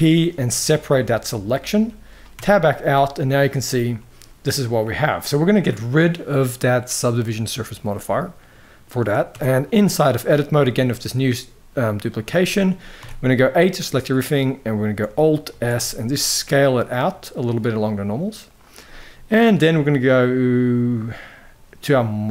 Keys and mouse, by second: 2.1 Tab, 3.1 middle drag, 3.4 g, 4.6 middle click, 7.4 click, 7.8-8.8 middle drag, 9.0 Tab, 9.5 middle click, 10.4 shift+middle click, 11.8 click, 12.2 middle click, 12.7 a, 12.9 middle click, 15.2 alt+s, 18.7 middle click.